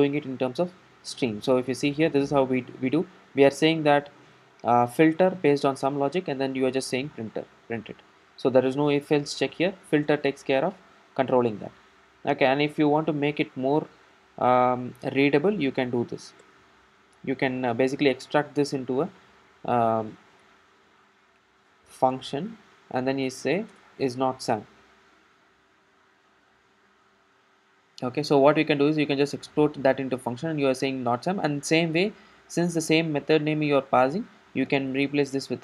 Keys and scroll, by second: 34.9 alt+Return.